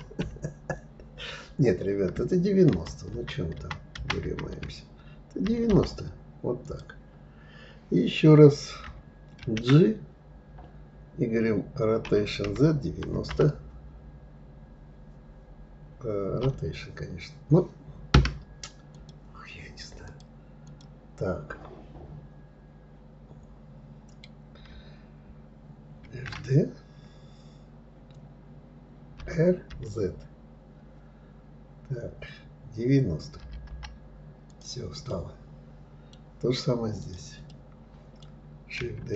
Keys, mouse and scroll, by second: 9.1 shift+d, 18.6 click, 19.7 click, 20.3 click, 25.7 shift+d, 34.8-36.7 middle drag, 36.7 click, 37.1-38.8 middle drag, 38.8 shift+d.